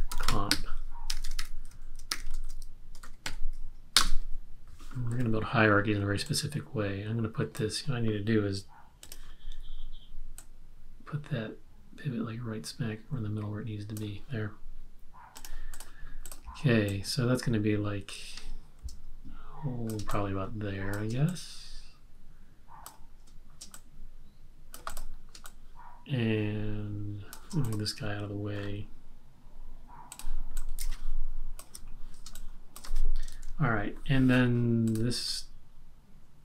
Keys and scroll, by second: 0.0-3.7 typing, 4.0 Return, 25.5 space, 32.4 space, 33.4 super+-.